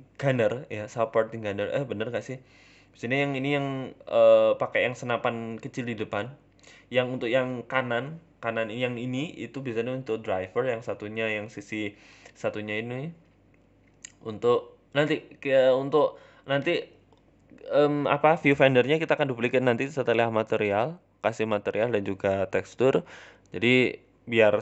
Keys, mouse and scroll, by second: 0.7 middle click, 1.4 s, 2.0 g, 3.5 middle click, 4.3-4.9 scroll down 10, 4.5 middle click, 4.9 middle click, 5.3-5.6 scroll up 5, 5.9 s, 6.7 g, 7.8-8.6 scroll down 6, 7.9 middle click, 8.3 Tab, 8.6 Tab, 8.7 middle click, 9.7 scroll up 3, 9.9 shift+a, 12.7 KP_1, 13.3 shift+middle click, 14.0 g, 15.3 shift+middle click, 15.6 s, 18.4 shift+middle click, 18.7 Tab, 19.1 shift+a, 19.9 shift+middle click, 20.5 g, 21.8 s, 22.9 g, 23.4 s, 24.3 s.